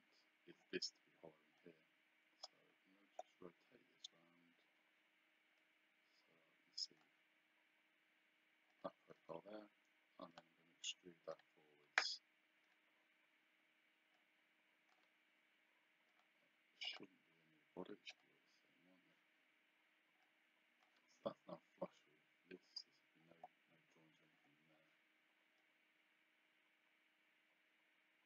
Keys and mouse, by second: 1.6 click, 5.6 click, 8.7 click, 9.2 right click, 10.3 click, 12.7 click, 14.2 click, 16.1 click, 18.1 click, 20.2 click, 25.6 click.